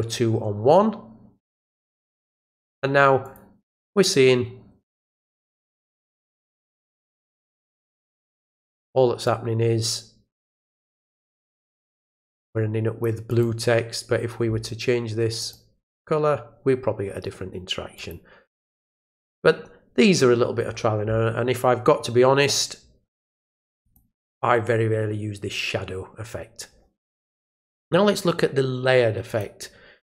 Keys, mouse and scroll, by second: 2.0 click, 3.2 click, 5.6-6.5 drag, 7.1 click, 9.2-13.0 drag, 13.3 click, 15.4 click, 15.9 click, 17.9 click, 22.4 click, 23.8 click, 29.3 click.